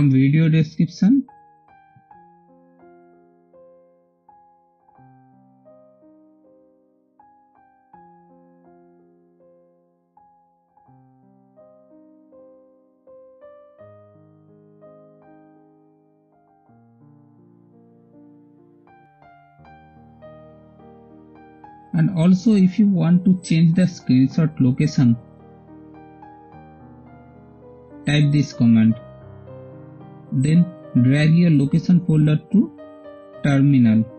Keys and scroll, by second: 0.0-5.1 typing, 6.9 Return, 9.0 shift+super+3, 23.2-25.3 typing, 27.2 super+v, 31.2 space.